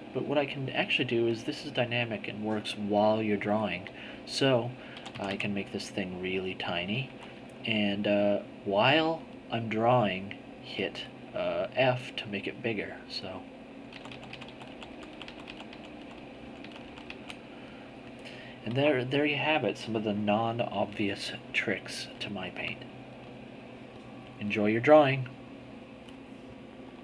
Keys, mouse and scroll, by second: 4.8 d, 5.5-6.8 drag, 7.0 z, 12.8-17.6 drag, 14.1 f.